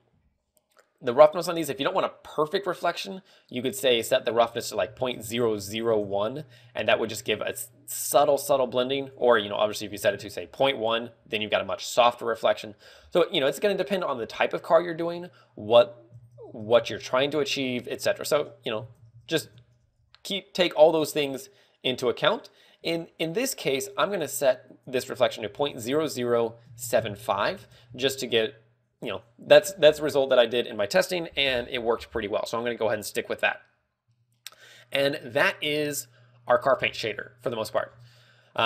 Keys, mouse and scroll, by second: 6.4 ctrl+click, 10.7 ctrl+click, 17.2 ctrl+click, 19.9 ctrl+click, 35.4 scroll, 37.2 scroll.